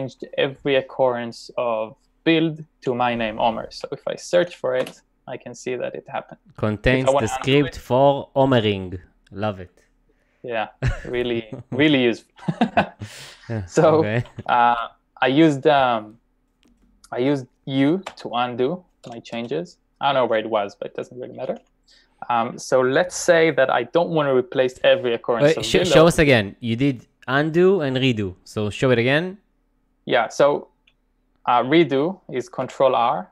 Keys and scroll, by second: 3.7-4.4 typing, 5.8 typing, 7.5 u, 10.1-10.5 typing, 13.7-14.7 typing, 16.8 typing, 18.1 n, 19.1 n, 32.7 ctrl+r.